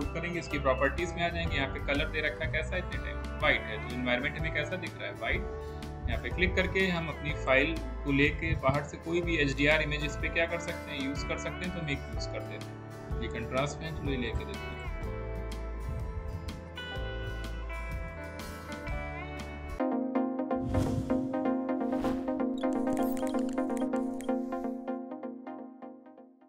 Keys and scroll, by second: 0.5 ctrl+a.